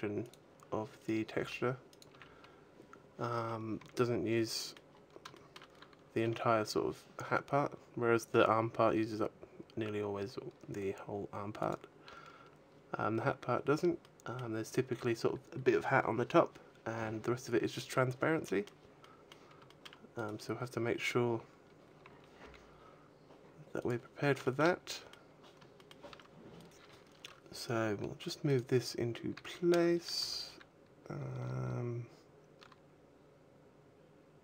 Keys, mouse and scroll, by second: 0.2 click, 0.7 right click, 1.2 g, 1.8 click, 2.0 a, 2.3-3.1 scroll down 3, 3.3-3.8 scroll up 3, 3.6 a, 4.7 middle click, 4.7 scroll up 2, 5.2 shift+middle click, 6.1 r, 11.5 click, 12.3-12.8 scroll down 2, 12.8-13.5 scroll up 2, 13.8 middle click, 18.3 middle click, 18.9 middle click, 19.5 shift+middle click, 19.9 shift+middle click, 20.0 right click, 20.7-21.4 scroll down 7, 21.5-21.9 scroll up 3, 21.9 a, 22.0 g, 23.6 click, 23.8-24.2 scroll up 1, 24.2 shift+middle click, 24.6 middle click, 25.1 scroll up 1, 25.6 shift+middle click, 28.3 right click, 29.1 a, 29.5 a, 30.0 r.